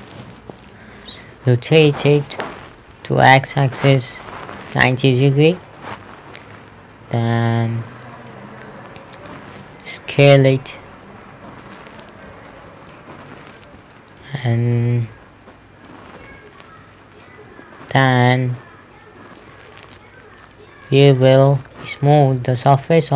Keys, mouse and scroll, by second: 0.4 middle click, 2.7-3.4 typing, 5.0 KP_9, 5.3 KP_0, 5.8 Return, 7.1 middle click, 9.6 click, 10.8 s, 12.1 click, 13.1 shift+middle click, 13.6 middle click, 14.3 shift+middle click, 14.8 scroll down 1, 14.9 scroll up 1, 15.5 middle click, 16.7 s, 17.5 click, 20.4 middle click, 22.6 click.